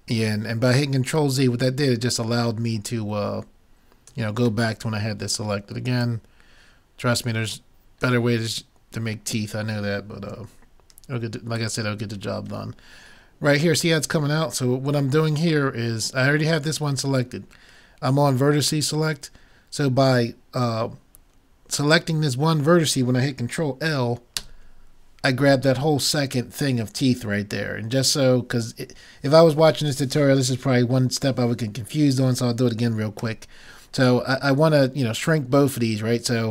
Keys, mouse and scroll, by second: 4.7-6.7 middle drag, 6.1-7.8 drag, 8.7-10.5 middle drag, 11.6-13.4 drag, 13.5 middle click, 24.4 ctrl+l, 33.2 a.